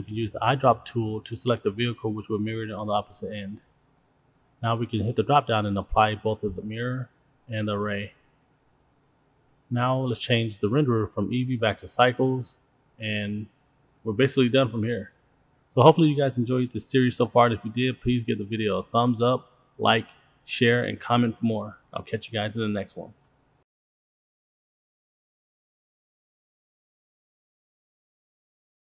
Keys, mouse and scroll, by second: 1.2 click, 4.8-5.8 drag, 7.6-8.6 drag, 9.4 click, 10.2-11.4 drag, 12.4-18.6 drag, 20.2-23.0 drag, 23.5-26.3 drag, 25.6 KP_0, 26.6-28.8 drag, 28.0 KP_0.